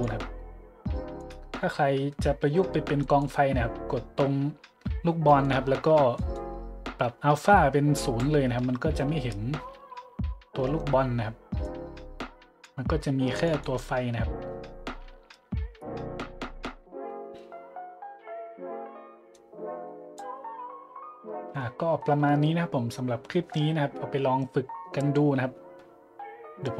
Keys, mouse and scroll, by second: 1.2 right click, 1.9 middle click, 3.0-3.3 drag, 5.3 middle click, 5.9 middle click, 6.1-6.5 middle drag, 7.3 click, 8.6 a, 11.6 click, 13.3 click, 19.3 click, 21.9 middle click, 22.5 middle click.